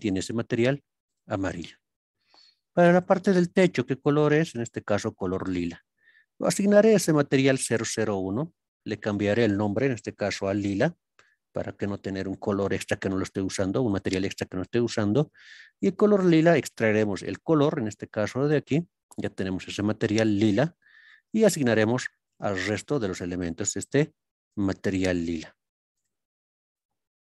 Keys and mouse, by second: 0.1-1.2 drag, 3.0-7.7 drag, 9.1-11.7 drag, 12.3 click, 21.4 click, 22.4 click, 24.5 click, 26.8 click.